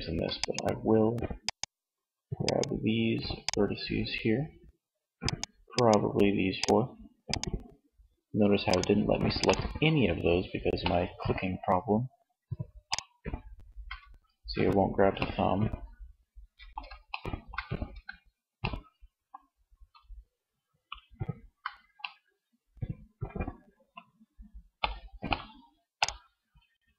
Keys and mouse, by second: 14.4 middle click, 22.7-24.2 middle drag, 26.5-26.9 middle drag.